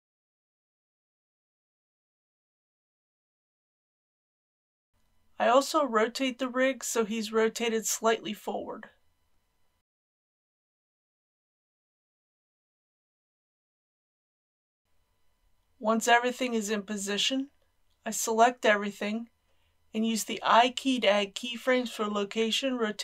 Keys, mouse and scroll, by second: 0.7 click, 1.2 g, 1.9 r, 2.6 click, 2.7 middle click, 4.5 KP_1, 4.9 click, 5.4 KP_1, 6.6 r, 11.8 click, 13.3 scroll down 1, 14.1 shift+middle click, 15.4 shift+a, 18.5 i, 19.4 click.